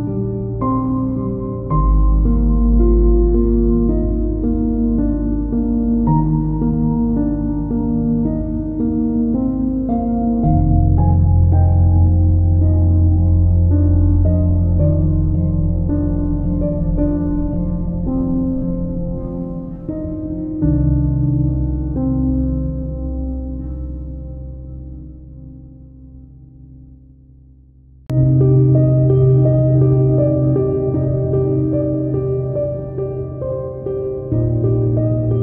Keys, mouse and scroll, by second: 0.1 click, 1.0 click, 1.2-1.5 scroll up 1, 1.5 middle click, 1.5 z, 1.7 KP_1, 1.8 scroll up 2, 2.0 shift+click, 2.6-3.2 scroll down 2, 2.9 shift+middle click, 3.2 scroll up 1, 3.2 shift+Tab, 3.7-5.7 typing, 3.9 Tab, 3.9 click, 4.2 Tab, 4.3 shift+middle click, 4.8 ctrl+r, 4.9 Escape, 4.9 scroll up 1, 5.3 shift+click, 5.6 click, 5.9 click, 6.0 ctrl+r, 6.2 Escape, 6.7 click, 7.1 y, 7.2 click, 7.2 y, 7.3 click, 7.5 click, 7.5 y, 7.8 Tab, 7.8 scroll down 1, 8.1 scroll up 1, 8.1 z, 8.2 shift+middle click, 8.3 click, 8.5 click, 8.7 Tab, 9.0 scroll up 1, 9.2 shift+click, 9.3 scroll down 1, 9.5-10.2 scroll up 1, 10.2 p, 10.6 click, 10.7 Tab, 11.2 click, 11.3 scroll down 1, 11.4 shift+middle click, 11.7-12.9 typing, 11.7 click, 11.9 Tab, 12.0 shift+middle click, 12.4 click, 12.5-15.1 middle drag, 12.7 scroll down 2, 13.0 scroll up 2, 13.5-14.2 scroll up 2, 14.2 click, 15.1 click, 15.2 shift+middle click, 15.5-16.5 drag, 16.4 scroll up 1, 16.5-17.7 middle drag, 16.5 KP_Decimal, 16.8 KP_Decimal, 17.0 scroll up 2, 17.2 Tab, 17.7-18.9 drag, 18.6 scroll down 2, 18.8 KP_1, 19.0 scroll up 2, 19.1 Tab, 19.2 shift+middle click, 19.3 3, 19.3 click, 19.5 click, 19.8 click, 19.9 Tab, 20.2 y, 20.2 click, 20.4 scroll down 1, 20.5 Tab, 20.6 scroll up 1, 20.7 middle click, 20.9 click, 21.0 KP_1, 21.2 Tab, 21.3 shift+middle click, 21.3 scroll down 2, 21.6 click, 21.7 Tab, 21.8 scroll up 2, 22.0-25.3 typing, 22.3 scroll down 1, 22.4 click, 22.6 Tab, 22.6-23.0 middle drag, 23.1 shift+click, 24.0 click, 24.2-35.4 middle drag, 24.2 Tab, 24.3 scroll up 2, 24.5 scroll down 2, 24.9 Tab, 25.2 ctrl+r, 25.5-26.1 scroll down 2.